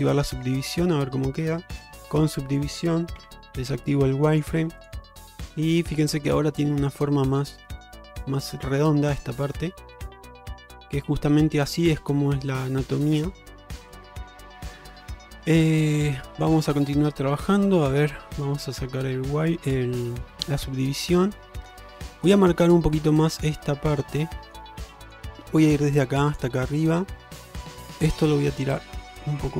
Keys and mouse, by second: 0.1 click, 0.7 Tab, 1.8 ctrl+Tab, 3.2 q, 5.2-6.0 middle drag, 6.2 shift+middle click, 6.5-7.1 middle drag, 7.2 shift+middle drag, 9.3-10.8 middle drag, 11.4-12.7 middle drag, 13.7 middle click, 14.7 shift+middle drag, 16.4 click, 16.7 Tab, 17.2 middle drag, 18.4 click, 18.8-20.3 middle drag, 20.9 middle click, 23.0 middle click, 24.4 middle click, 25.1 click, 26.7 middle click, 28.6-29.5 drag.